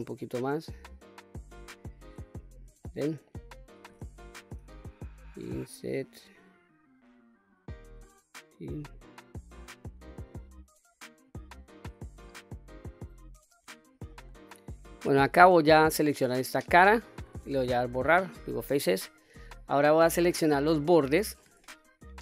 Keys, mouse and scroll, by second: 0.1 click, 1.9-2.7 scroll up 2, 2.9-3.6 shift+middle drag, 4.6 i, 7.9 click, 8.9 click, 11.7-12.2 scroll up 2, 14.2 right click, 14.7 ctrl+z, 16.8 click, 18.0 Delete, 19.9 middle click, 20.7 scroll down 1, 20.8 middle click.